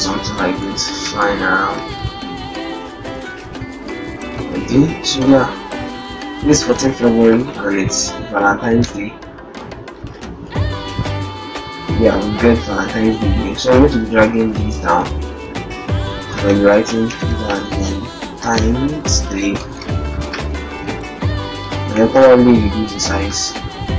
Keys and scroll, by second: 1.0 Right, 1.3 Right, 1.6 Right, 6.9 Right, 11.4 alt+Tab, 16.3 ctrl+alt+shift+Return, 16.6 ctrl+alt+shift+s, 19.7 shift+v, 20.2 s, 21.7 d.